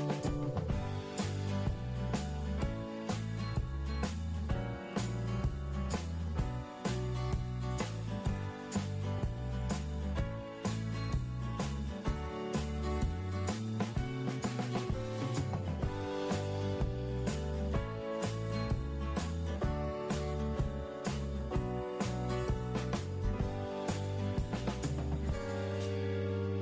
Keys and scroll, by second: 6.2 ctrl+d, 6.6 ctrl+d, 16.2 ctrl+x, 17.2 ctrl+a, 17.8 ctrl+Delete, 18.7 ctrl+s.